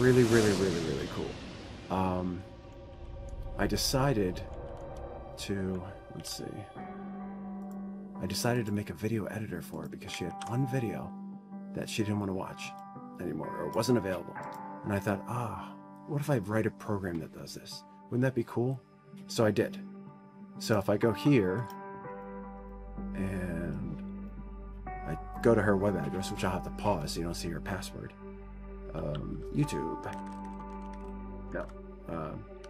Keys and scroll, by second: 30.6-32.6 typing, 32.3 ctrl+a.